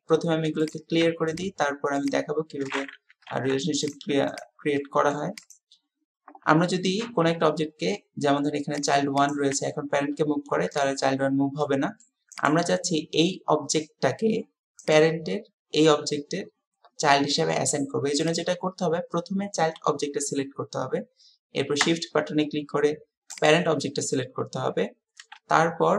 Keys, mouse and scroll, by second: 1.4 shift+click, 2.0 shift+click, 3.3 alt+p, 4.8-5.2 middle drag, 5.4 click, 7.2 g, 9.2 click, 9.5 g, 11.6 middle click, 12.3 click, 12.6 g, 14.9 click, 18.3 click, 23.4 shift+click.